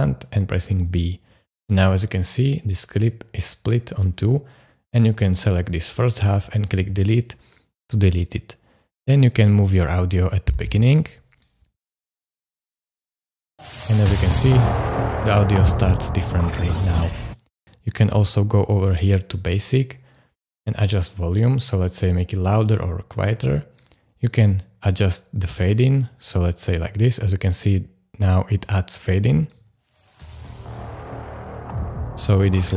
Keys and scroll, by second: 0.9 super+b, 6.7 BackSpace, 13.4 space, 17.2 space, 29.6 space.